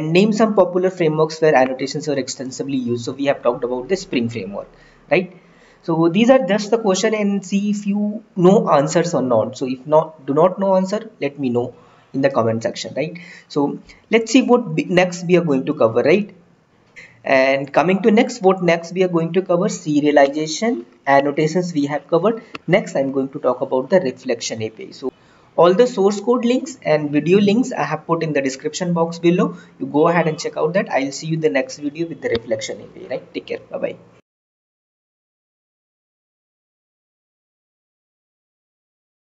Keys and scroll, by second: 14.1 Right.